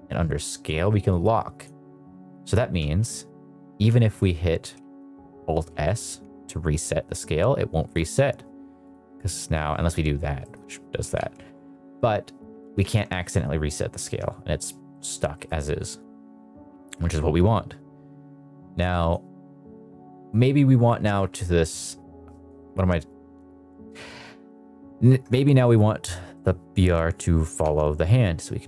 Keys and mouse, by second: 0.6 click, 2.7 alt+s, 3.6 alt+r, 4.8 ctrl+z, 5.7 alt+s, 5.9 alt+s, 7.7-8.9 right drag, 10.3 middle drag, 11.2 ctrl+z, 12.6 alt+s, 12.7 alt+s, 14.0 Escape, 14.8 middle drag, 15.3 middle click, 17.5-19.1 drag, 21.2 middle drag, 25.5 middle click, 26.2 middle click, 27.5 ctrl+Tab.